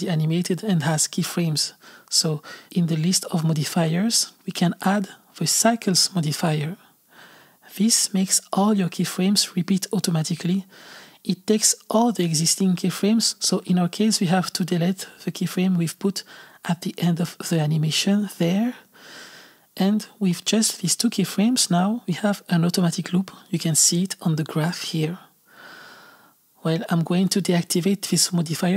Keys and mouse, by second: 12.3 click, 13.7 click, 15.8 click, 18.2 x, 24.0-27.1 drag, 28.5 click.